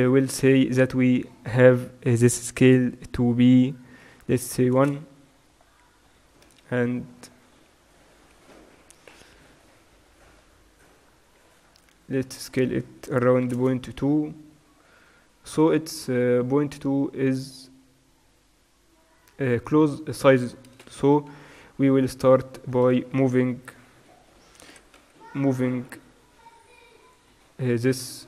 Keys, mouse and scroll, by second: 6.8 KP_Decimal, 9.7 middle click, 11.1 middle click, 12.4-13.6 middle drag, 13.6-14.7 drag, 15.0 middle click, 20.9 n, 21.9 a, 22.0-24.4 drag, 22.8 a, 23.7 a, 24.8 g.